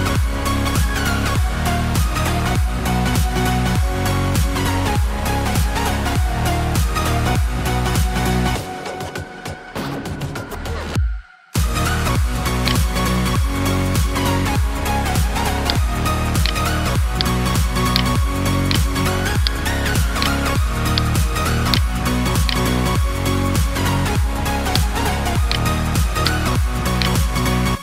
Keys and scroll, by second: 22.4 alt+BackSpace, 27.4 ctrl+d, 27.7 ctrl+space.